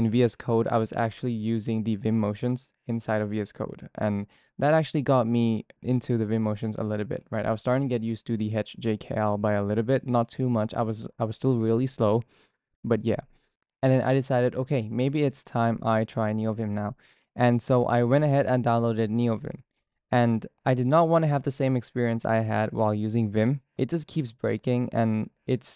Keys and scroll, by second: 0.0-9.6 typing.